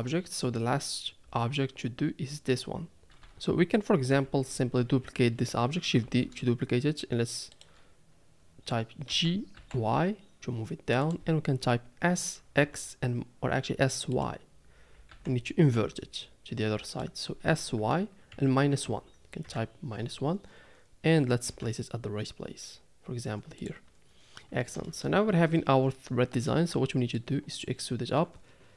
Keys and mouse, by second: 3.0 a, 3.2 a, 4.1 l, 6.0 shift+d, 9.1 g, 12.1 s, 15.0 s, 17.4 s, 21.5 g, 24.8 shift+middle click, 25.2 a, 26.5 middle click.